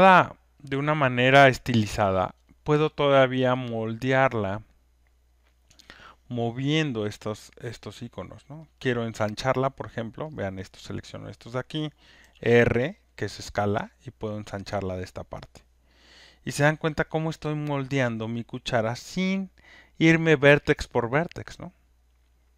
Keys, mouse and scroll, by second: 2.3 alt+click, 5.3 click, 7.0 alt+click, 7.5 alt+middle click, 8.5 alt+click, 8.8 alt+right click, 9.1 alt+middle click, 9.9 alt+click, 10.3 alt+scroll, 10.9 click, 12.6 alt+right click, 13.9 alt+scroll, 14.6 click, 14.6 r, 15.3 alt+scroll, 15.4 alt+middle click, 17.9 alt+click, 19.8 click.